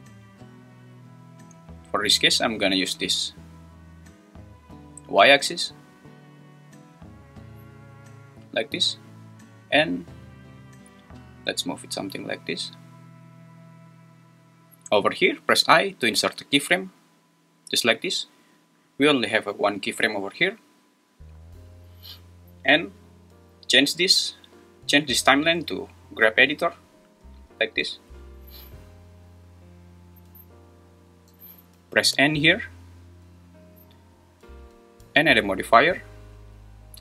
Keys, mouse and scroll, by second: 0.3 click, 2.3-8.8 drag, 10.6-12.6 drag, 18.1 click, 19.0 drag, 19.9 click, 23.7-27.9 drag.